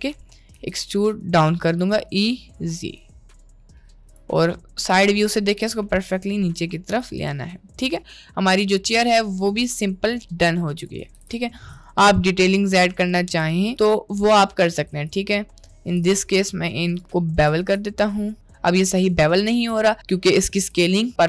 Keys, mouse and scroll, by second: 0.1 middle click, 0.6 r, 1.8 e, 5.6 g, 7.3 Tab, 7.5-9.1 middle drag, 8.9 Tab, 10.7 click, 11.1 g, 12.6 1, 13.2 2, 14.1 middle click, 14.7 alt+click, 15.1 alt+shift+click, 17.5 ctrl+b, 19.3 Tab, 20.7 n.